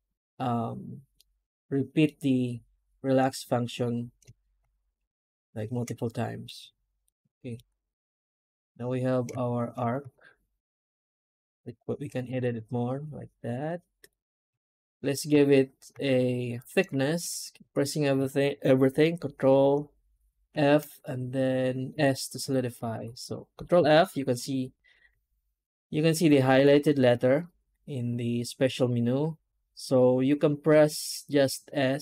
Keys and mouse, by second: 1.0 middle click, 5.9 middle click, 6.2 middle click, 6.5 1, 6.9 alt+middle click, 9.6 shift+z, 14.4 a, 14.6 middle click, 15.4 ctrl+z, 17.1 shift+z.